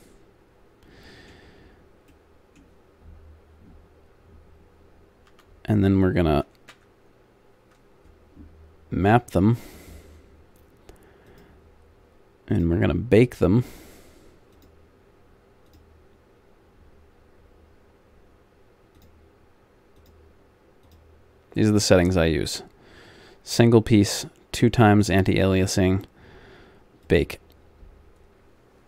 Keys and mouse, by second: 2.3 middle click, 4.5 middle click, 5.2 a, 6.8 ctrl+p, 11.2-13.6 drag, 15.7 click, 19.0-28.8 drag.